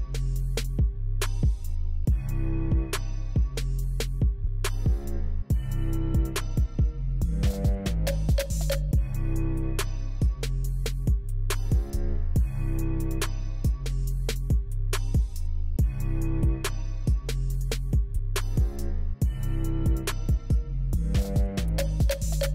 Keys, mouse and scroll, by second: 2.4 f, 4.4 F4, 11.7 p.